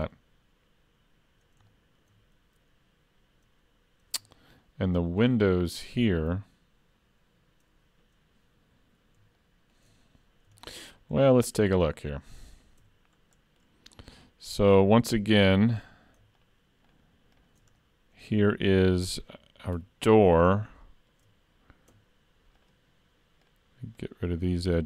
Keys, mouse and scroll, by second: 1.4 scroll up 2, 1.7 shift+middle click, 9.4 shift+middle click, 10.3 scroll up 2, 10.6 shift+middle click, 11.0 middle click, 11.8 scroll up 1, 11.9 middle click, 12.8 Tab, 13.3 middle click, 14.1 click, 16.2 shift+3, 16.4 shift+click, 17.8 middle click, 19.8 2, 20.4 scroll up 2, 20.9 shift+middle click, 21.1 shift+scroll up 1, 22.6 shift+click.